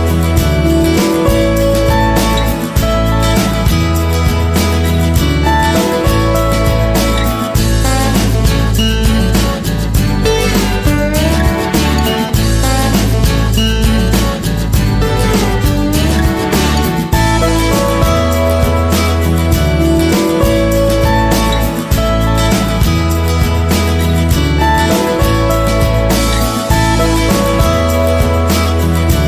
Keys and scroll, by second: 5.2 ctrl+=.